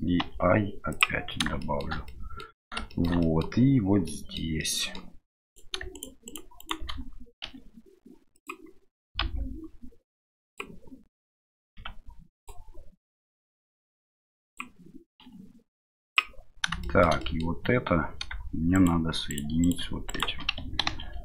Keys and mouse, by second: 1.7 shift+middle click, 2.1 middle click, 3.0 shift+middle click, 3.3 middle click, 4.0 middle click, 4.6 middle click, 5.5 right click, 5.9 shift+right click, 6.2 shift+right click, 6.6 shift+right click, 11.3 middle click, 13.4 middle click, 13.9 click, 16.9 shift+click, 17.2 middle click, 18.7 shift+right click, 19.3 shift+right click, 19.6 shift+right click, 20.0 shift+right click, 20.8 ctrl+e.